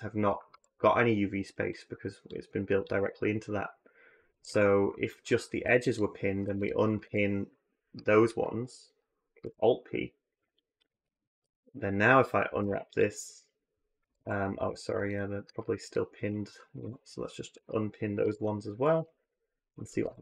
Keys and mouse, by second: 0.3 a, 4.1 a, 4.3 a, 5.4 2, 6.2 3, 6.8 a, 9.2 alt+p, 10.7 a, 10.9 a, 11.2 a, 12.4 u, 13.8 a, 14.0 a, 16.6 a, 18.0 alt+p, 19.8 a, 20.0 a.